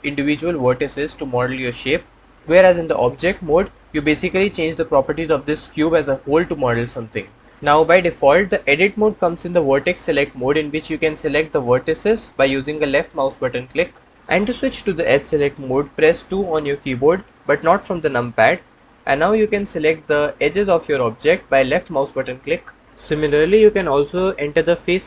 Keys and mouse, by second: 3.2 Tab, 7.8 Tab, 11.6 click, 12.7 click, 13.3 click, 16.9 2, 20.6 click.